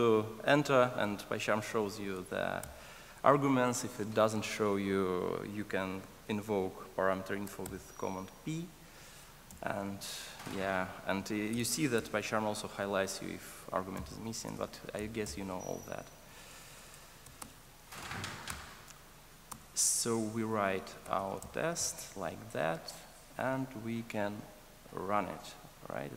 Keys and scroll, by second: 2.6 super+p, 7.5 super+p, 18.4 Return, 23.0 super+s.